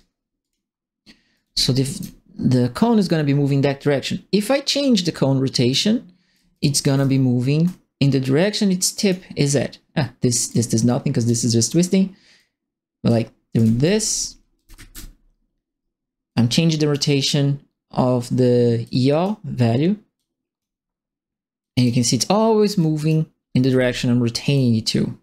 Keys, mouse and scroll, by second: 0.4 click, 1.3 right click, 1.4 s, 4.6-5.7 drag, 6.1-7.0 typing, 6.3 right click, 8.4 click, 10.4 click, 12.3 click, 13.3-15.2 typing, 13.5-14.9 right drag, 16.2 click, 18.8 click, 20.1 click, 21.6 click, 22.7 click, 23.7 e, 24.5-25.2 drag.